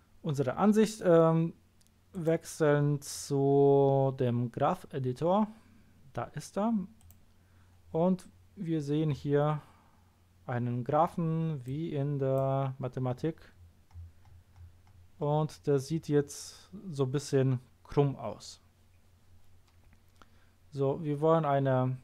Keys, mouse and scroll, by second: 2.1 click, 6.9 click, 8.1-11.6 scroll down 3, 11.6-12.3 drag, 12.8-13.9 scroll down 1, 13.9-15.5 scroll up 3, 15.5-16.1 scroll down 1, 16.1 scroll up 1.